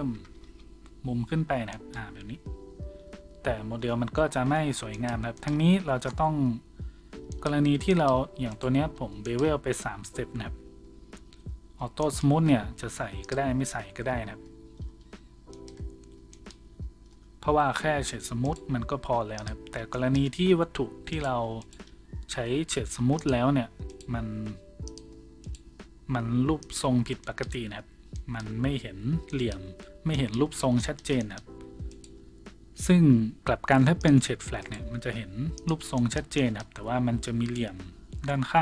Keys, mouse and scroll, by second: 1.9-14.0 drag, 4.0 ctrl+z, 5.7 Tab, 6.9 Tab, 8.7 Tab, 11.4 Tab, 14.0-23.9 middle drag, 14.2 Tab, 14.7 Tab, 16.6 Tab, 17.1 Tab, 18.4 right click, 18.4 w, 19.7 w, 21.1 right click, 21.6 right click, 23.9 right click, 23.9-38.6 middle drag, 25.4 click, 31.9 right click, 32.5 w, 36.0 w.